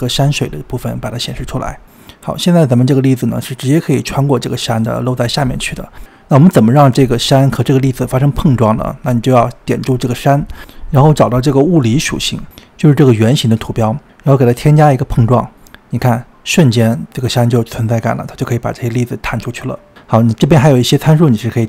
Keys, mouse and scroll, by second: 1.2 click, 1.5 shift+a, 2.8 click, 4.0-7.0 middle drag, 7.0-7.4 scroll down 3, 7.4-8.3 middle drag, 8.3-9.5 scroll up 2, 9.5 click, 10.5-11.1 scroll up 2, 11.1 scroll down 2, 11.3 click, 11.5 click, 13.7 click, 15.1-17.2 drag, 17.2-20.1 middle drag, 20.2-21.5 scroll up 2.